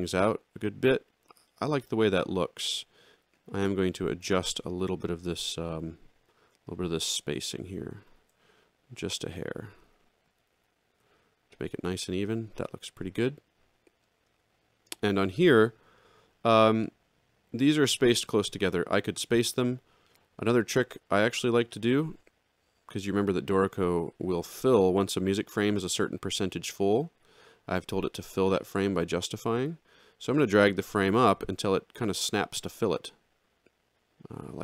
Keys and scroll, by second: 8.1 ctrl+alt+Down, 9.1 Down, 9.4 alt+Up, 9.9 Down, 10.4 ctrl+alt+Down.